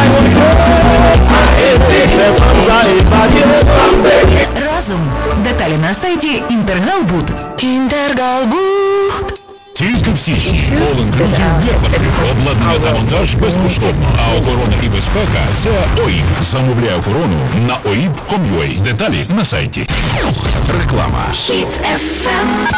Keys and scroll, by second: 4.6 Page_Down, 16.4 Page_Down.